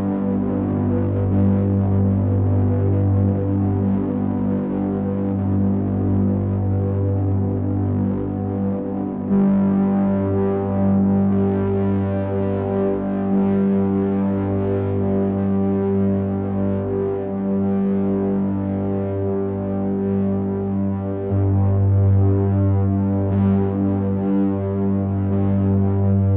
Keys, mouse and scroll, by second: 0.0-1.5 scroll down 4, 1.5 click, 1.5-2.5 scroll down 2, 4.3 click, 7.3 middle click, 10.2 click, 11.4 click, 16.2 click, 20.6 click, 24.9 click.